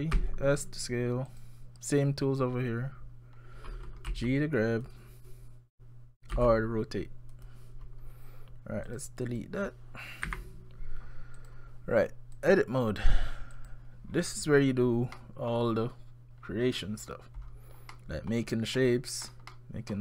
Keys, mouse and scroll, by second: 0.2 s, 3.4 scroll down 1, 3.6-4.1 scroll up 3, 4.1 g, 6.3 r, 8.9 click, 9.3 click, 10.3 Delete, 11.4 click, 12.4 click, 14.1-15.1 scroll down 5, 15.1 scroll up 1, 15.2 middle click, 16.4-16.9 scroll down 3, 16.9-17.4 scroll up 6, 17.4-17.7 scroll down 2, 17.8 scroll up 1, 17.9 middle click, 18.8 middle click, 19.5 middle click.